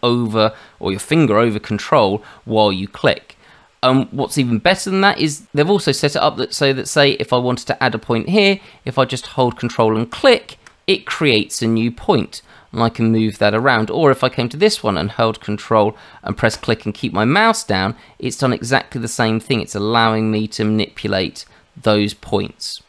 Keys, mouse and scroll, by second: 10.1 ctrl+click, 12.4 click, 16.5 ctrl+click.